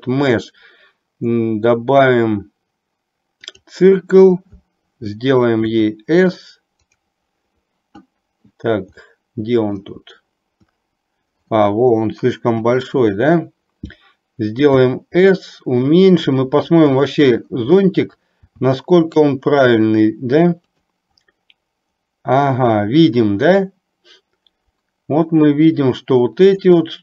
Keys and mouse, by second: 9.0-9.9 middle drag, 12.6 KP_7, 14.9 s.